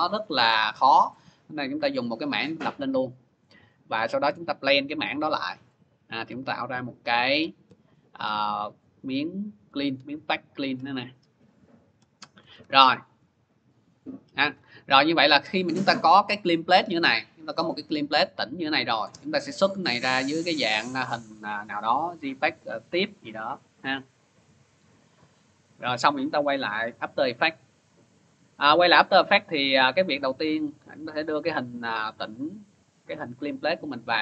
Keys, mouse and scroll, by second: 2.4 click, 4.3 click, 4.8 click, 7.1 click, 8.0 click, 10.5 click, 11.0 click, 11.6 click, 11.8 click, 11.8 click, 12.4-17.5 ctrl+-, 18.7 scroll, 18.9 click, 20.0 click, 21.4 click, 23.0 click, 24.2 click, 26.4 click, 28.2-29.2 scroll, 29.2 middle click, 30.1 click, 30.3 click, 31.7 click, 32.6 click, 33.2 click, 33.4 click.